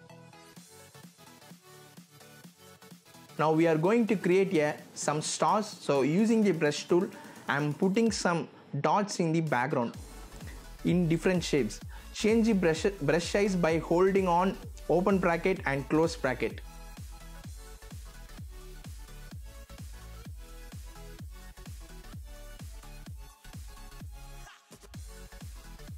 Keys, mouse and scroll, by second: 4.4 z, 4.7-6.4 drag, 7.7 scroll down 1, 7.9-8.5 scroll up 1, 8.5 click, 10.2 click, 20.6-25.9 drag.